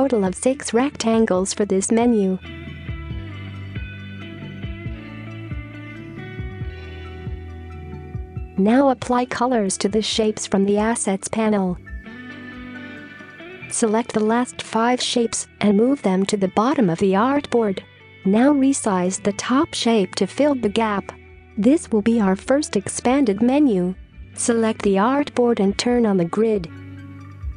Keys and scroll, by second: 1.9 typing, 2.3 Return, 5.2 typing, 5.7 Return, 22.8 space.